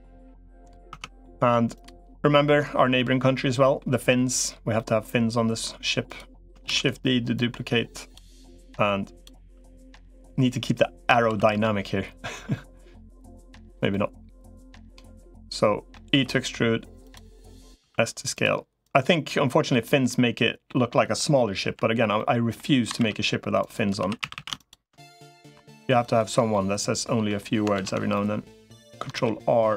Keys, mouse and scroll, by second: 0.8 Tab, 1.0 middle click, 2.4 middle click, 3.4 middle click, 4.5 middle click, 6.6 shift+d, 7.2 click, 8.4 click, 9.2 s, 11.2 s, 13.7-14.9 middle drag, 15.2 middle click, 16.0 e, 17.1 middle click, 17.6 s, 18.6-19.6 drag, 19.9 middle click, 21.6 l, 21.9 middle click, 22.8 ctrl+r, 24.0 3, 24.0 a, 24.2 a, 24.4 alt+shift+click, 25.4 i, 26.3 middle click, 27.6 ctrl+z, 27.9 middle click, 29.0 ctrl+r.